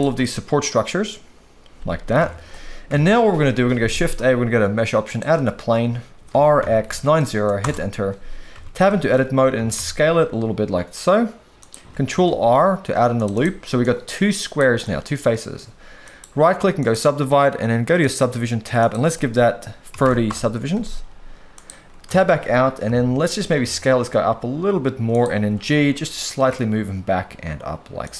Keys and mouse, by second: 0.2-2.1 middle drag, 2.2 alt+a, 2.9 KP_1, 3.9 shift+a, 6.3 r, 6.6 x, 6.8 9, 6.9 0, 7.6 Return, 8.6 Tab, 8.9 shift+middle click, 9.6 s, 9.8 x, 11.6 click, 12.2 ctrl+r, 13.2 click, 13.3 click, 13.8 click, 14.8 middle click, 16.0 right click, 18.8-20.3 drag, 21.5 click, 22.1 Tab, 22.8 KP_3, 23.6 s, 25.5 g.